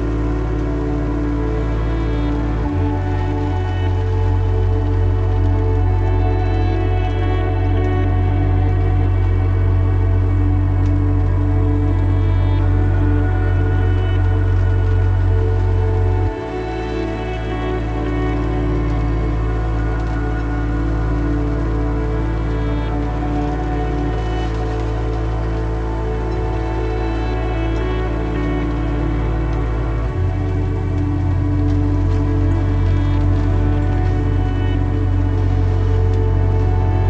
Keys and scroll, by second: 5.4-6.3 typing, 30.0 1, 30.5 1, 33.4 1, 36.0 1.